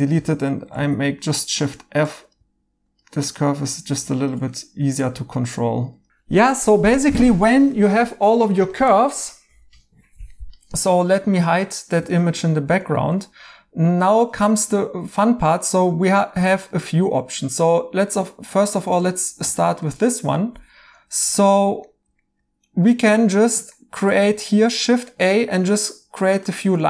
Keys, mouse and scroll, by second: 0.7 f, 4.5 right click, 6.9 right click, 8.1 2, 10.8 Tab, 12.1 right click, 12.7 2, 14.7 right click, 18.2 right click, 21.8 right click, 23.7 right click.